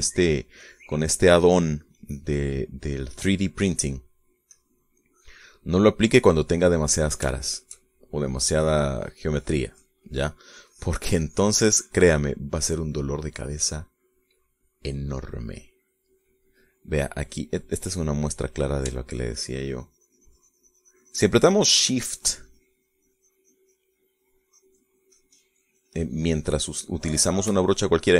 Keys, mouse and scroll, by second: 0.0 middle click, 1.0 middle click, 1.9 click, 2.6 click, 3.2 click, 3.8 middle click, 4.8 middle click, 5.8-7.8 drag, 8.0 middle click, 8.6 shift+click, 9.8-11.7 shift+drag, 12.0 click, 12.5 click, 13.3-14.8 middle drag, 14.8-18.9 scroll up 1, 18.9 scroll up 1, 19.4 middle click, 20.0 scroll up 1, 20.2-28.1 shift+drag.